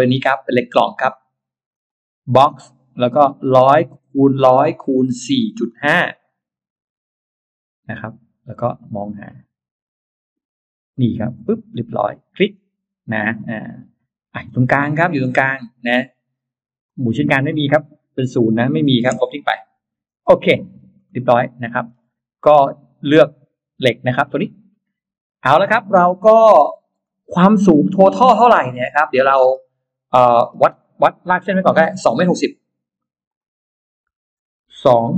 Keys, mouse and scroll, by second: 1.5 click, 2.9-3.3 scroll down 2, 5.2-5.5 scroll up 1, 6.9-7.7 scroll up 2, 8.0 scroll up 1, 8.9-9.3 scroll up 1, 11.2 click, 12.4 click, 14.3 click, 15.1 click, 16.7 click, 18.3 0, 18.7 BackSpace, 19.0 BackSpace, 20.3-20.9 scroll up 2, 21.1 middle click, 21.8-22.5 scroll up 4, 26.2-26.8 scroll up 2, 26.9 middle click, 27.4-28.1 scroll down 5, 28.3 middle click, 29.1 scroll up 1, 30.1 scroll down 1, 31.1 middle click, 32.4 l, 33.1 click, 34.7 2.